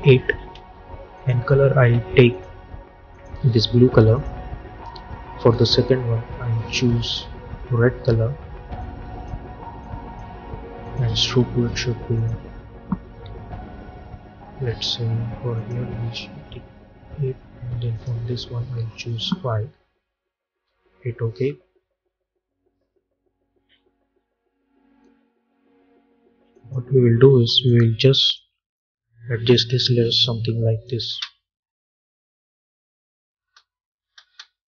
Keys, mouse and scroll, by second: 0.4 Return, 1.0-10.7 drag, 15.4 click, 17.8 click, 20.4 Return, 26.4-31.0 drag, 31.0 space, 33.3 space.